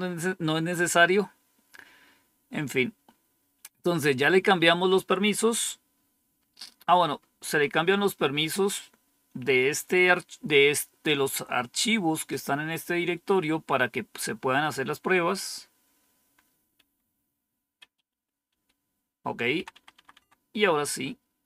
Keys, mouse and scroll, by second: 1.0-1.9 scroll up 1, 1.9 scroll down 1, 4.5 scroll down 1, 5.3 scroll down 1, 5.9 scroll down 1, 6.8-8.1 scroll down 1, 8.1 Up, 16.7 Down, 17.7 Up, 18.0 Up, 18.4 Up, 19.5 Down, 19.6 Down, 19.9 Down, 20.0 Down.